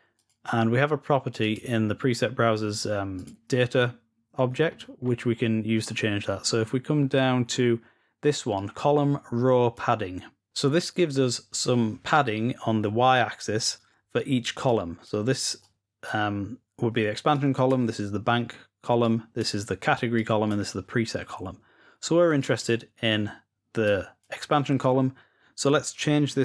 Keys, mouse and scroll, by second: 0.0-0.8 drag, 1.3 click, 3.1 click, 4.3-6.2 scroll down 4, 7.0-8.0 scroll down 2, 8.5-10.3 drag, 12.9-13.9 drag, 14.4-16.3 drag, 17.1-18.1 drag, 18.8 click, 19.9 click, 22.1 click, 23.6-24.8 drag.